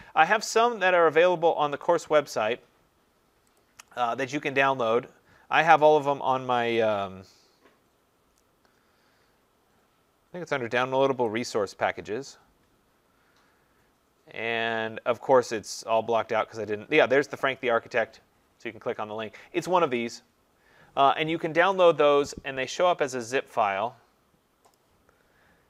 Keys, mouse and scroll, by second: 1.9 click, 3.6 click, 4.3-5.2 scroll, 5.2 scroll, 11.4 click, 12.9-13.4 scroll, 21.8 click, 23.3 click, 24.8 click.